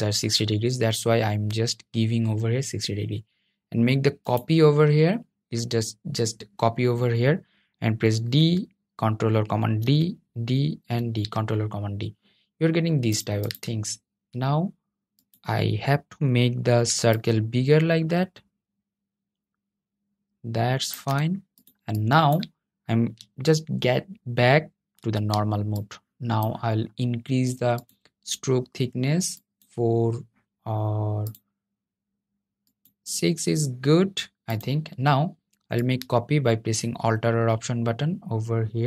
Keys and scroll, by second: 7.4 super+d, 8.9 super+d, 9.4 super+d, 9.9 super+d, 24.0 super+y.